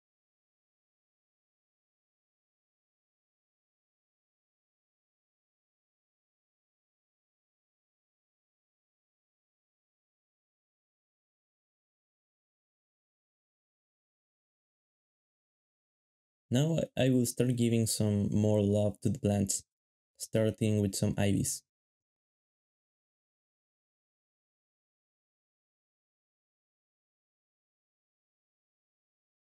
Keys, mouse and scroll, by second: 2.2 alt+a, 2.7 alt+a, 5.0 ., 5.2 shift+middle click, 5.3 ctrl+Tab, 5.5 g, 6.9 ctrl+b, 7.5 shift+middle click, 9.1 z, 13.3 shift+middle click, 13.3 ctrl+b, 14.2 alt+shift+z, 14.3 alt+shift+z, 15.1 shift+middle click, 15.8 alt+shift+z, 15.8 alt+shift+z, 16.0 ctrl+Tab, 16.5 shift+middle click, 16.6 alt+d, 16.7 alt+shift+z, 17.2-21.1 typing, 20.3 shift+click, 20.9 shift+middle click, 22.1 ctrl+b, 22.8 shift+middle click, 23.3 shift+middle click, 23.4 alt+shift+d, 24.6 g, 25.2 g, 25.3 shift+z, 26.3 alt+d, 26.5-29.5 typing.